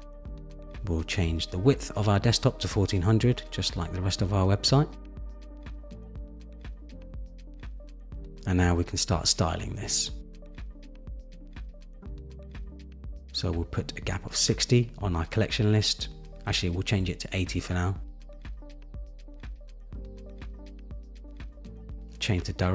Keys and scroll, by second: 3.7 Return, 17.0 shift+Up.